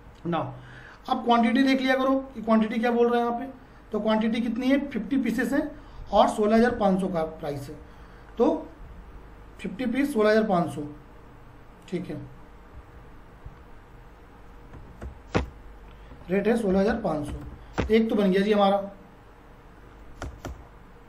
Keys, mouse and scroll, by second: 0.0 F4, 2.9 click, 6.6 click, 7.8 F4, 9.0 F4, 10.1 click, 12.7 F4.